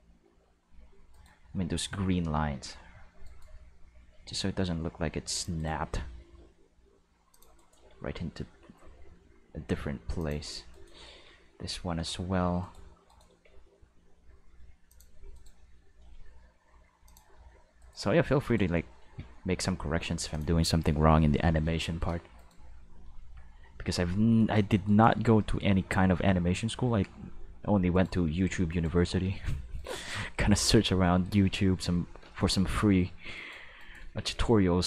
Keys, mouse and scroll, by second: 1.1 right click, 2.5 g, 3.2 right click, 4.1 g, 5.3 click, 5.6 right click, 5.8 g, 7.3 click, 7.6 right click, 7.7 g, 10.2 click, 10.7 right click, 11.1 g, 11.6 middle click, 12.6 right click, 13.0 right click, 13.2 g, 14.9 click, 15.3 right click, 15.9 g, 17.0 click, 17.3 r, 17.8 right click, 18.4 right click, 19.0 g, 20.3 click, 21.1-22.5 shift+middle drag, 22.3 right click, 23.0 g, 24.3 right click, 25.0 g, 27.9 right click, 28.7 right click, 29.2 g, 29.7 right click, 32.0-32.8 shift+middle drag, 33.3 right click, 33.7 shift+right click, 34.1 c.